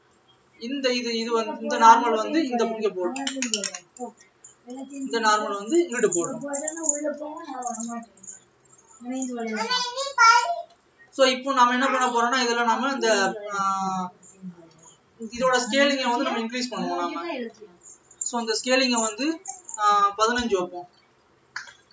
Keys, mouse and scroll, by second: 1.2 click, 3.9 click.